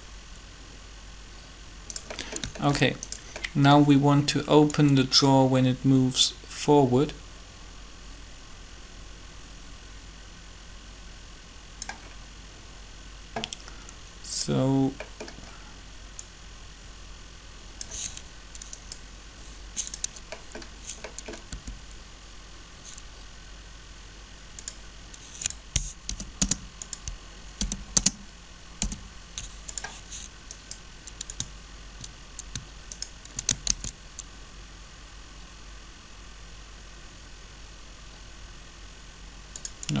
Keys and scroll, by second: 21.5 r, 25.8 0, 26.4 Return, 27.5 0, 27.9 Return, 28.8 i, 34.9 shift+d.